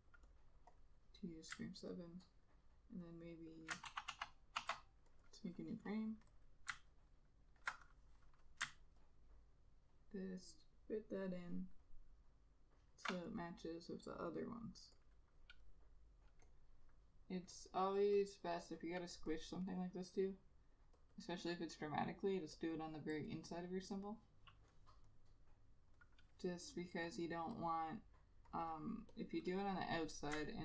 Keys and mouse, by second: 2.1 alt+click, 3.2 alt+click, 4.0 ctrl+z, 4.2 ctrl+z, 4.7 ctrl+z, 5.4 double click, 7.0 alt+click, 9.2 ctrl+alt+click, 12.0 ctrl+alt+click, 15.2 double click, 21.3 double click.